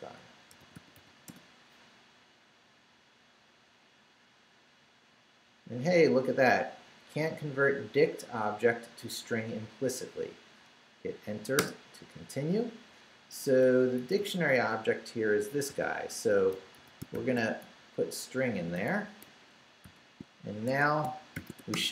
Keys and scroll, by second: 0.0-1.2 typing, 11.6 Return, 13.6 Left, 15.7 i, 16.8-17.6 typing, 18.4 Right, 19.2 shift+Right, 19.8 shift+0, 20.7 shift+Escape, 21.1-21.9 typing.